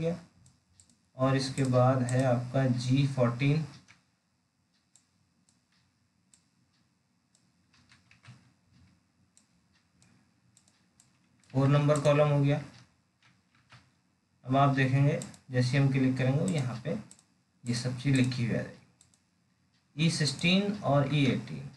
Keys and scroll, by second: 3.7 alt+Tab, 12.8 alt+Tab, 21.0 alt+Tab.